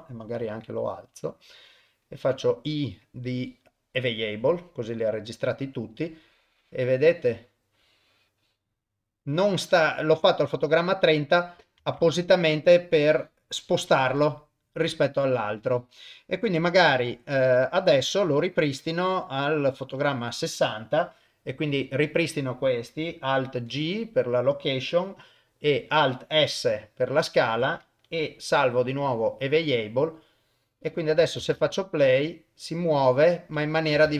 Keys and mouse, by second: 0.4 g, 2.2 i, 5.9-11.3 drag, 12.0 ctrl+Tab, 13.0-16.4 drag, 18.3-20.1 drag, 23.7 alt+g, 26.5 alt+s, 28.5 i, 30.2-31.1 drag, 31.4 shift+space, 33.9 shift+space.